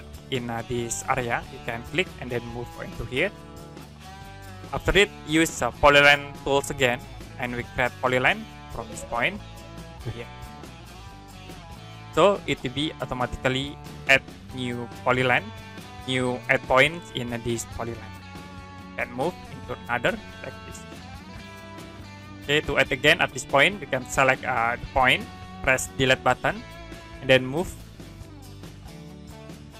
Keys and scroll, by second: 12.9 Escape, 26.4 Delete.